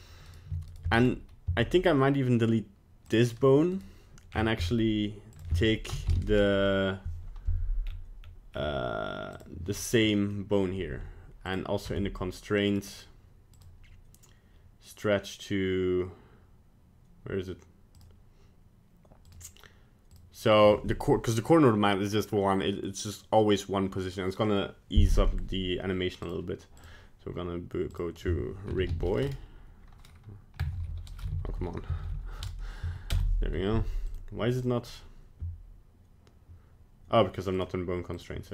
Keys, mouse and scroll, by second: 0.3 right click, 0.7 shift+right click, 1.0 right click, 1.5 x, 3.7 right click, 4.3-5.3 scroll down 10, 5.3 click, 5.3-5.7 scroll down 2, 10.1 middle click, 11.4 click, 12.0 Tab, 12.7 right click, 13.5 click, 19.3 click, 26.2 click, 27.9 click, 34.1 click, 37.5 click, 38.1 click.